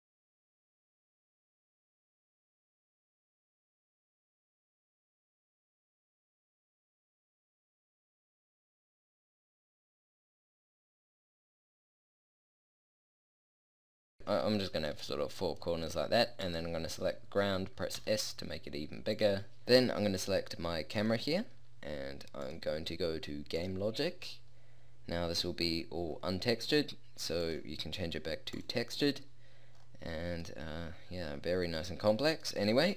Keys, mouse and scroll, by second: 0.4 a, 0.6 alt+z, 2.0 KP_0, 4.2 shift+d, 5.2 g, 5.6 a, 9.6 ctrl+j, 9.8-14.5 typing, 14.6-15.6 drag, 16.5-18.2 right drag, 18.0 s, 19.2 click, 21.0-22.4 drag, 23.8-24.6 drag, 27.4-29.6 middle drag, 29.8-31.6 middle drag.